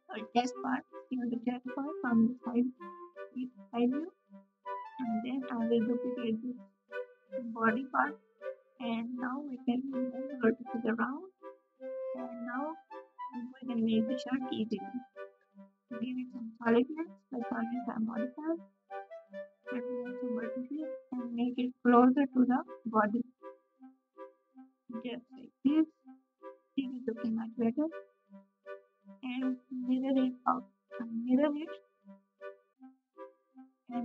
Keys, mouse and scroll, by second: 5.7 g, 7.7 ctrl+z, 14.6 KP_8, 14.6 KP_6, 14.6 KP_2.